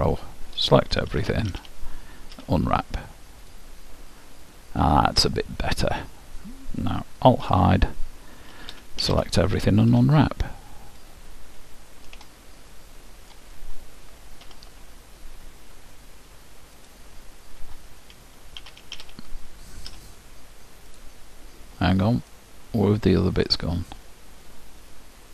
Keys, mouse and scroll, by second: 1.0 a, 1.6 a, 2.4 u, 4.4 middle click, 7.4 alt+h, 8.5 a, 9.0 a, 9.9 u, 12.4-14.4 middle drag, 14.4 alt+h, 16.9-18.6 drag, 18.6 a, 19.0 a, 19.9 u, 22.4-25.3 middle drag.